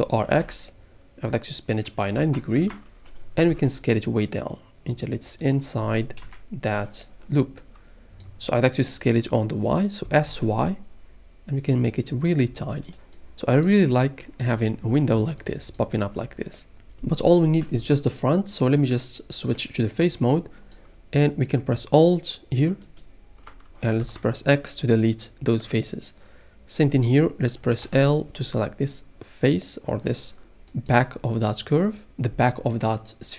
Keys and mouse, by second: 0.2 r, 0.3 x, 2.0 KP_9, 2.2 KP_0, 2.5 KP_Enter, 3.5 s, 5.4 click, 6.2 KP_Decimal, 10.0 s, 10.3 y, 12.8 click, 22.9 alt+click, 24.0 x, 27.8 l.